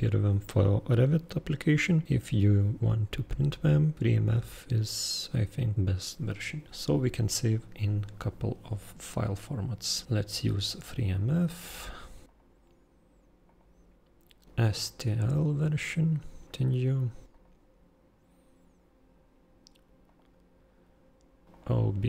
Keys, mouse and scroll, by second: 11.7 super+click, 12.2 super+click, 13.4 super+click, 15.1 super+click, 16.4 super+click, 17.3 super+click, 20.0 super+click, 21.5 super+click.